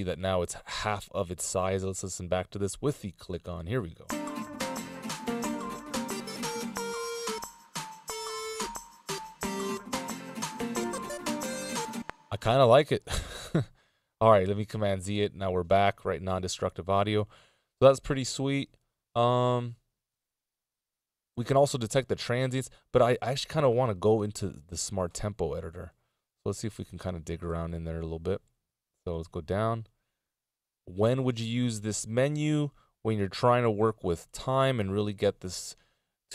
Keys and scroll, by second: 3.1 k, 11.8 space, 13.4 super+z, 34.1 F16, 34.2 Delete.